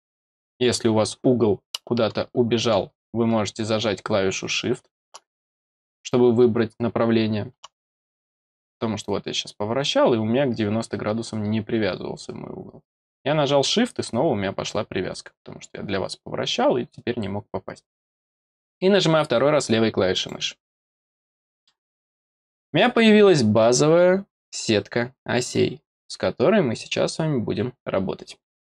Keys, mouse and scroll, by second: 20.1 click, 21.1 middle click, 22.6 middle click.